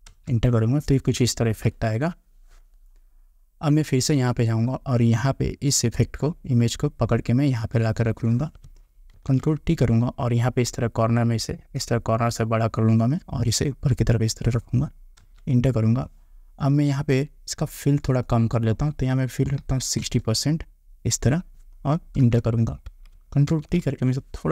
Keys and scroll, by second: 0.3 Return, 15.4 Return, 19.8 6, 22.4 Return.